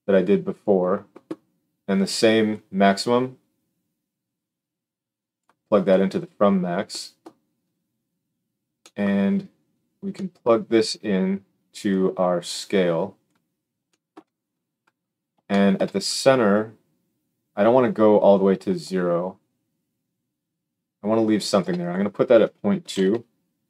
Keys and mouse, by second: 21.9-23.6 drag.